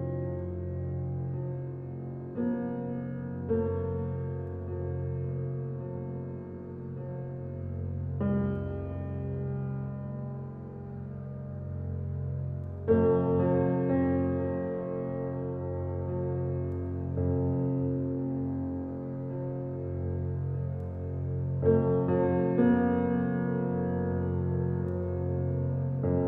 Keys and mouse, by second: 3.6 click, 3.6 Tab, 4.5-8.4 drag, 9.8 click, 10.5 click, 14.0 click, 14.8 click, 15.7 click, 16.3 Tab, 17.1 click, 18.1 click, 18.8 click, 20.3 click, 20.5 click, 21.3-22.1 drag, 22.5-22.9 drag, 23.7 s, 25.4 click, 25.8 Tab, 25.9 click.